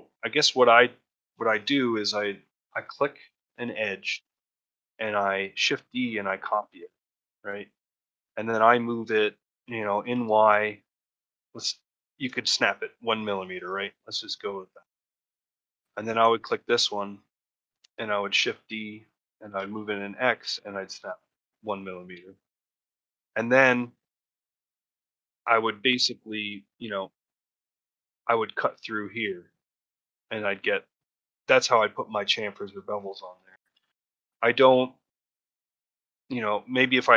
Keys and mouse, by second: 2.7 shift+middle click, 3.4 shift+middle click, 15.2 shift+middle click, 15.9 click, 16.6 shift+middle click, 22.1 shift+middle click, 23.8 shift+middle click, 25.7 shift+middle click, 33.0 shift+middle click, 33.4 ctrl+middle click, 33.7 shift+middle click.